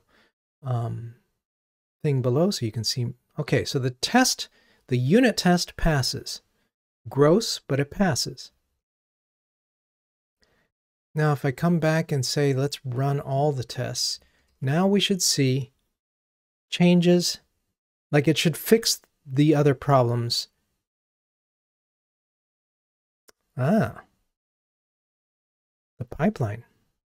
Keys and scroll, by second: 14.4 ctrl+r.